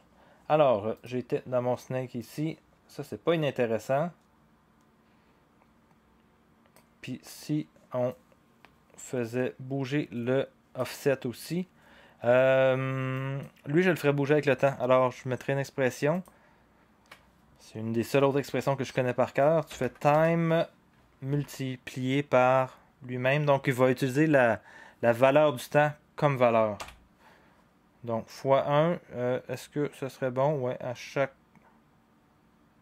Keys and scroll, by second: 19.5-21.3 typing, 26.8 1.